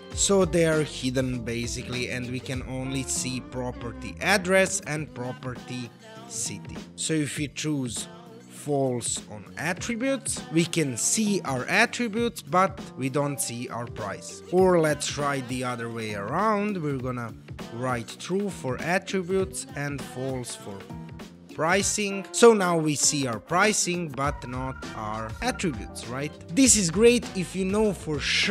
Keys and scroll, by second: 8.0-9.2 typing, 16.5-17.6 typing, 19.6-20.7 typing.